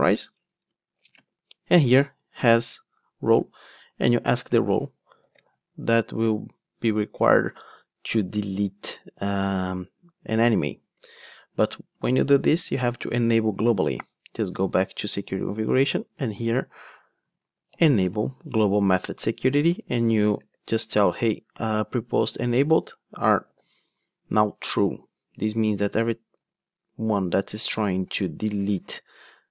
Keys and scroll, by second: 18.6 Return, 20.3 Return, 20.4 ctrl+space, 22.4 Return, 26.4 ctrl+d.